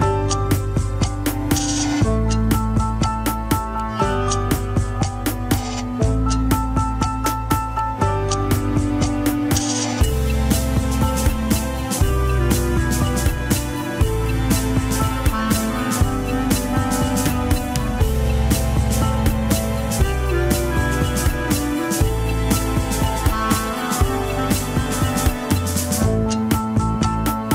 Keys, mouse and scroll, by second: 0.5-1.0 scroll down 3, 1.0 shift+middle click, 1.2 scroll up 1, 1.7 click, 2.4 shift+click, 3.2 click, 4.1 r, 5.8-6.2 scroll up 4, 6.0 shift+middle click, 6.6 r, 7.7 scroll up 2, 7.9 shift+middle click, 8.4 click, 9.0 alt+z, 9.3 alt+z, 9.5 click, 10.2 scroll down 2, 10.4 middle click, 11.7 KP_7, 11.9-12.6 scroll up 1, 12.6 shift+middle click, 13.1 shift+click, 13.6 shift+click, 14.0 scroll up 3, 14.8 click, 17.2 click, 17.7 alt+z, 18.0 alt+z, 18.7-19.0 scroll down 1, 19.0 click, 19.9 click, 20.8 KP_1, 22.3 shift+middle click, 22.6 KP_3, 23.3 click, 23.6 x, 24.4 click, 24.7 shift+s, 25.5 click, 26.0 shift+s, 27.0 click, 27.4 shift+click.